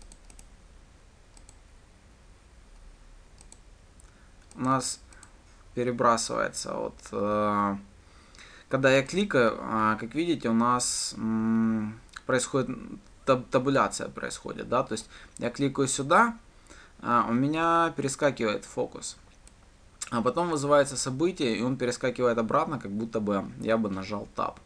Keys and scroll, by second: 2.0 ctrl+shift+F10.